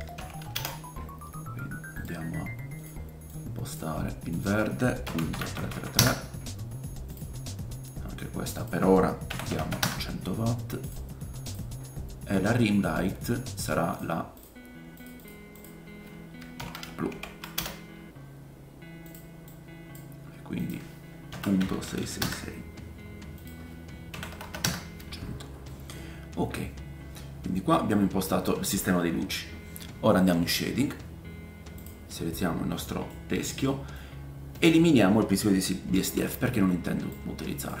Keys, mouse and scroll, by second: 5.5 KP_3, 9.6 KP_0, 10.9 click, 11.5-14.3 drag, 14.4 click, 15.1 click, 19.1-27.3 drag, 19.1 middle click, 19.1 right click, 21.7 KP_6, 21.8 KP_6, 23.3-30.3 middle drag, 23.3-27.3 right drag, 24.4 KP_0, 27.4 click, 27.4 right click, 30.3-34.6 drag, 30.8-31.6 scroll down 2, 31.6 scroll down 3, 31.8 middle click, 31.8 right click, 32.3-33.2 scroll down 2, 32.7 middle click, 33.3 scroll up 1, 36.2 x, 37.1-37.8 drag.